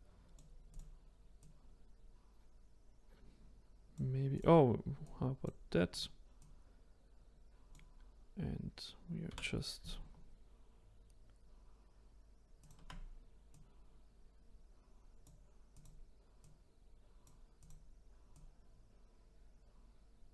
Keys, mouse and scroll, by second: 0.7-1.4 drag, 4.3 click, 5.0-6.0 drag, 6.4 drag, 9.3 r, 13.5 click, 15.7 click, 16.4 click, 17.5 click, 18.3 click.